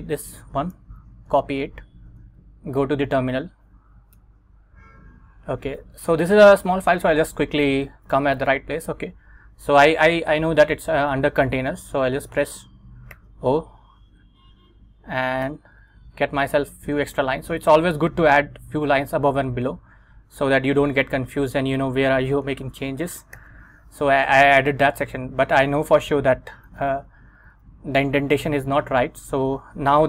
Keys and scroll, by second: 0.9 super+c, 2.3 super+Tab, 4.3 Return, 7.0 Down, 8.2 Down, 13.2 o, 15.5 Return, 16.3 Return, 17.1 Up, 23.5 super+v, 26.1 Escape, 26.8 Up, 27.5 Up, 28.4 Down.